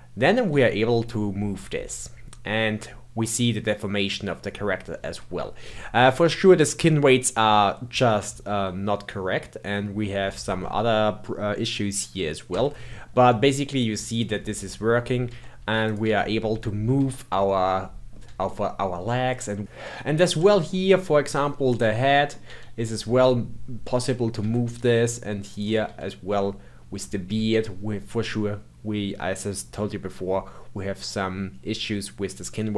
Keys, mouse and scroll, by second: 0.5 g, 12.9-14.1 middle drag, 14.1 click, 14.2 g, 15.8 click, 16.0 g, 17.6 middle click, 18.2 g, 19.6-21.6 middle drag, 21.6 click, 22.1-22.4 middle drag, 22.4 r, 25.5 click, 25.8 r.